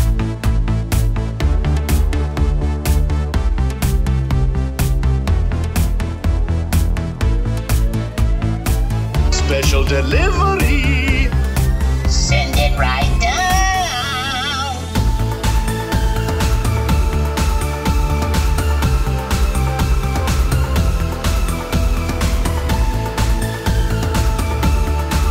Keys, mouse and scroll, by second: 2.4-4.2 drag, 4.2 typing, 7.2 click, 12.1 click, 15.2-16.8 drag, 18.7-21.1 middle drag, 24.0 alt+a.